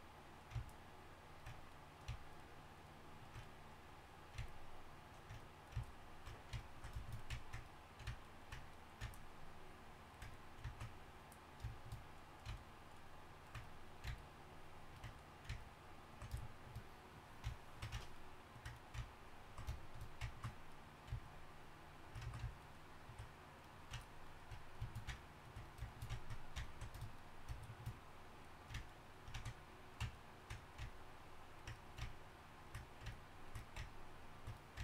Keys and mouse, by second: 0.8-4.0 drag, 0.8-4.0 right drag, 5.9 drag, 5.9 right drag, 6.5 right click, 7.2-9.2 middle drag, 11.6-13.7 right drag, 16.4-24.0 drag, 16.4-24.3 right drag, 24.6 right click, 27.7-34.8 right drag, 30.9-34.8 drag.